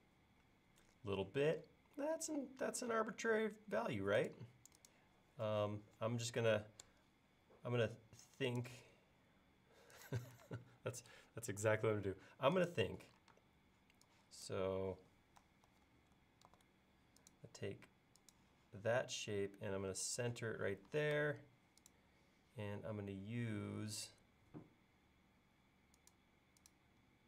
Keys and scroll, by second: 2.8 i, 10.5 space, 13.3 space, 15.7 super+x, 16.5 super+v.